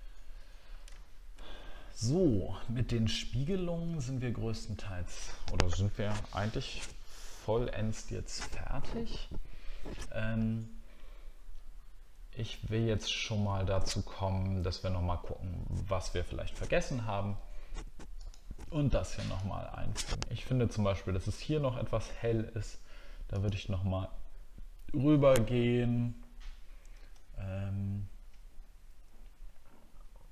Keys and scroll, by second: 27.2 alt+scroll down 1.